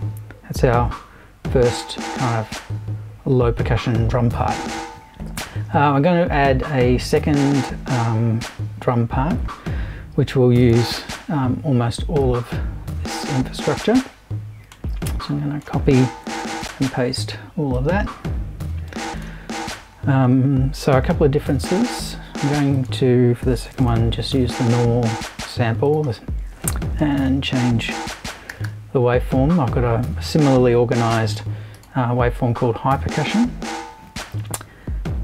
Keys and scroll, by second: 16.4 super+c, 16.6 super+v, 23.4 BackSpace, 27.0-29.1 typing.